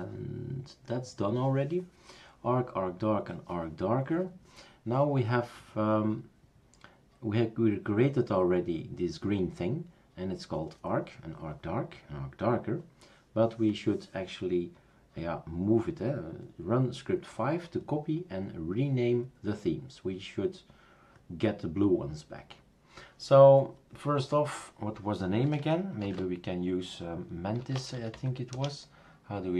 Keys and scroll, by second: 26.0 super+d, 27.3-28.6 typing.